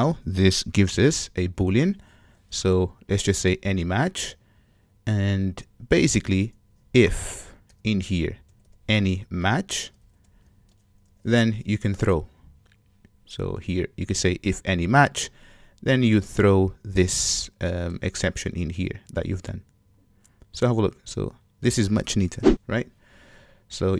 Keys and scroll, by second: 0.1 super+w, 2.4 alt+super+v, 3.7 Return, 17.2 super+c, 18.5 super+v.